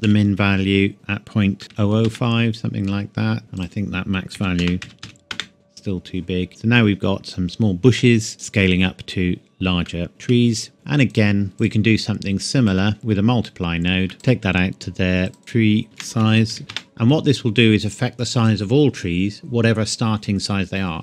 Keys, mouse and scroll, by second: 0.0 KP_Decimal, 1.6 KP_0, 2.0 KP_Enter, 3.6 click, 4.3 KP_Decimal, 4.6 KP_0, 4.8 KP_2, 5.0 KP_5, 5.3 KP_Enter, 6.5 scroll up 1, 6.6 scroll down 1, 7.0 scroll up 1, 7.6-8.0 scroll up 1, 8.0 middle click, 8.3-9.8 scroll down 1, 10.0 shift+middle click, 10.2 shift+scroll up 1, 10.6-11.1 scroll down 1, 11.1 click, 11.5 shift+d, 11.6 click, 14.1 click, 15.4-16.5 typing, 16.7 KP_Enter.